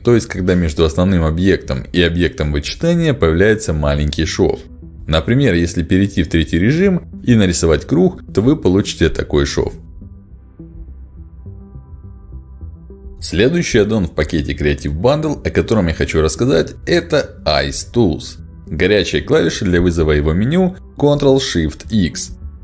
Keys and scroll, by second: 4.6 3, 6.4 space, 8.1 space, 20.5 ctrl+shift+x.